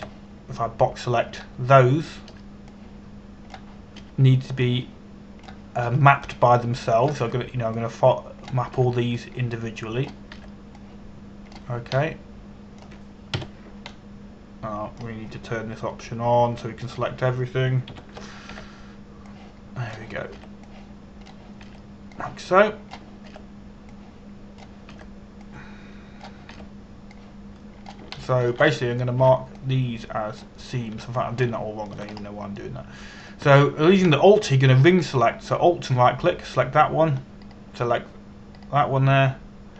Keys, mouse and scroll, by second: 1.6 b, 1.7 click, 3.9 b, 4.4 click, 5.6 b, 6.3 click, 7.5 b, 8.0 click, 8.9 b, 9.5 click, 10.4 b, 10.8 click, 12.0 b, 12.5 click, 13.6 middle click, 15.0 KP_Decimal, 15.6 middle click, 18.5 click, 19.6 ctrl+KP_1, 20.2 b, 21.0 click, 22.0 b, 22.3 click, 23.3 b, 23.8 click, 24.9 b, 25.6 click, 26.6 b, 27.1 click, 28.2 b, 28.7 click, 29.8 shift+middle click, 30.4 scroll down 1, 30.8 b, 31.3 click, 32.6 a, 33.1 shift+middle click, 33.8-34.2 scroll up 1, 34.2 middle click, 37.5 alt+right click, 39.2 alt+right click.